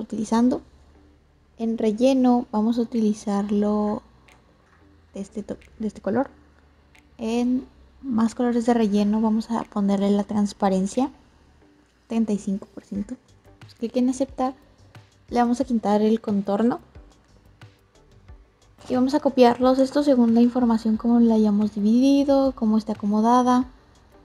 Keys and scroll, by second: 19.5 ctrl+c, 19.7 ctrl+v.